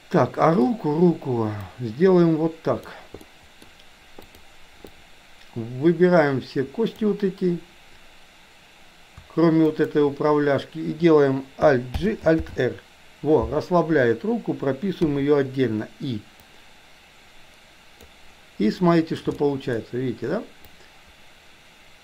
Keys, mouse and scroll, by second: 1.8-2.9 drag, 3.3-3.6 middle drag, 4.3 click, 4.9-7.0 drag, 9.6 shift+click, 12.0 alt+g, 12.4 alt+r, 15.0 i, 16.4-18.1 drag, 18.8-19.1 shift+middle drag, 19.3-19.8 middle drag, 20.6-22.0 drag.